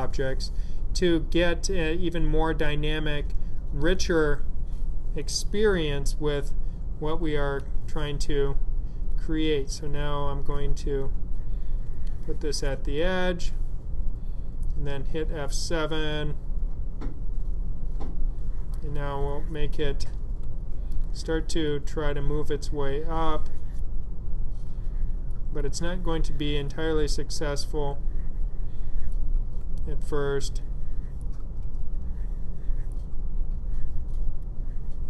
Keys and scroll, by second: 7.4 F7, 15.0 F7, 20.3 F7, 23.9 F7, 29.2 F7, 31.3 F7, 33.0 F7.